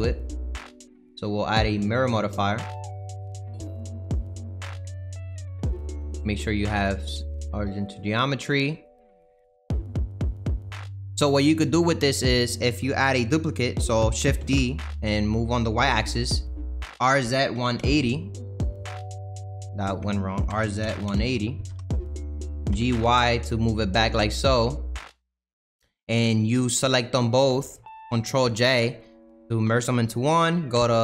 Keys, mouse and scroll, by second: 4.8-6.0 drag, 7.3-10.3 right drag, 10.7 click, 14.3 shift+d, 16.9 r, 19.5 ctrl+z, 20.5 r, 22.7 g, 27.1 shift+click, 28.4 ctrl+j, 29.4-30.7 shift+middle drag, 30.7 Tab.